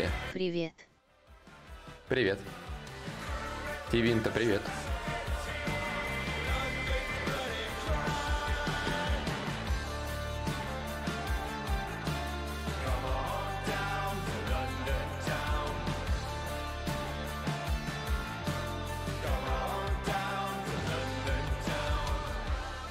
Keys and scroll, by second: 13.4-15.1 typing.